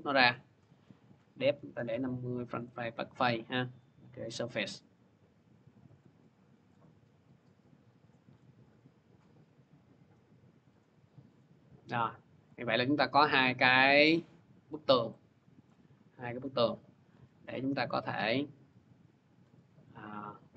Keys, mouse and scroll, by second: 1.0 click, 1.1-2.2 typing, 2.4 click, 2.9 click, 3.6 click, 5.8 click, 6.6 click, 8.1 v, 10.6 click, 13.3 click, 15.5 scroll, 16.8 middle click, 16.9 c.